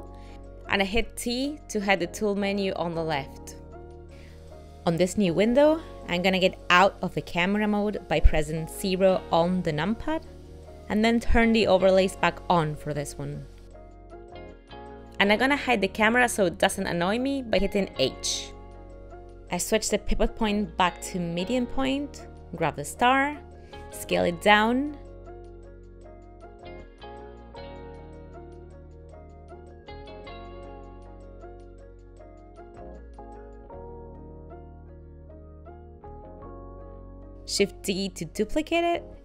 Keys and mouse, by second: 10.1 KP_0, 19.8 click, 20.1 ., 22.3 click, 23.9 s, 27.8 ctrl+middle click, 28.3 shift+middle click, 28.9 r, 31.1 click, 31.4 s, 31.8 ctrl+middle click, 32.1 shift+middle click, 32.3 middle click, 32.9 middle click, 33.1 g, 34.0 middle click, 34.0 g, 38.2 shift+d.